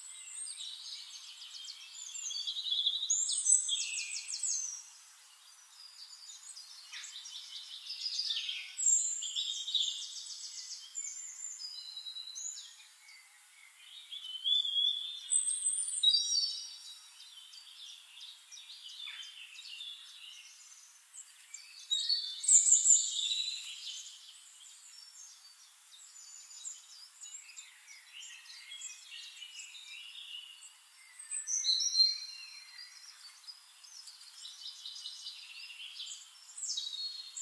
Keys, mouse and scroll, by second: 0.1 click, 1.8 click, 2.5 right click, 7.7 click, 10.1 ctrl+click, 10.5 ctrl+right click, 12.4 click, 13.6 shift+click, 15.3 click, 16.9-18.1 drag, 18.6 click, 19.3 click, 20.3 click, 21.6 shift+click, 26.2-28.6 drag, 30.9 click, 31.9 click, 34.9 click, 36.6 click.